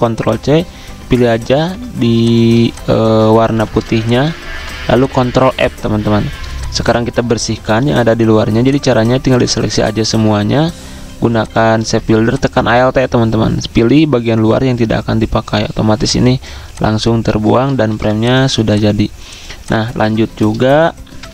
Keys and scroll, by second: 1.5 ctrl+f, 2.5 z, 3.5 v, 4.5-7.3 typing, 8.3-9.1 typing, 17.7-18.9 typing, 20.2 v, 21.2 F5.